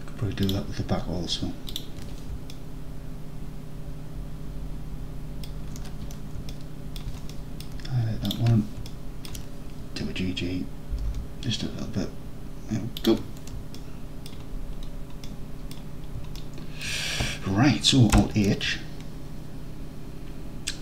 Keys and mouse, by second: 2.7-3.8 alt+middle drag, 3.9 alt+middle click, 4.3 alt+middle click, 4.7 alt+middle click, 5.3 alt+middle click, 6.6-7.0 alt+middle drag, 7.4-7.7 middle drag, 8.3 shift+drag, 8.9-9.3 alt+drag, 11.0 g, 11.1 g, 13.0 shift+click, 13.8-14.3 alt+drag, 15.3 middle click, 16.4 alt+middle click, 18.2 alt+h.